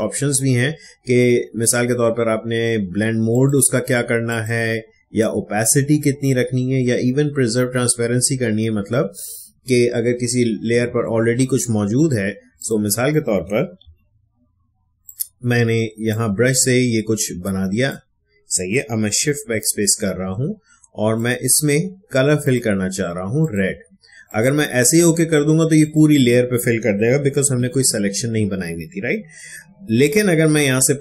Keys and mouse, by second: 3.3 click, 12.5 click, 15.0-19.3 drag, 19.3 shift+BackSpace, 27.4 ctrl+z, 29.7 shift+BackSpace.